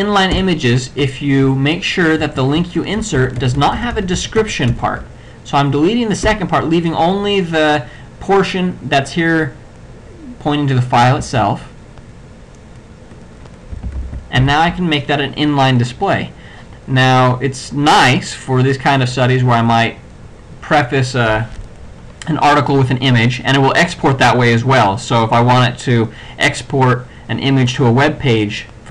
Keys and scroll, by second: 0.4 BackSpace, 2.2 ctrl+b, 3.2 BackSpace, 6.3 BackSpace, 11.2 ], 14.0 ctrl+c, 14.0 ctrl+x, 14.5 ctrl+v.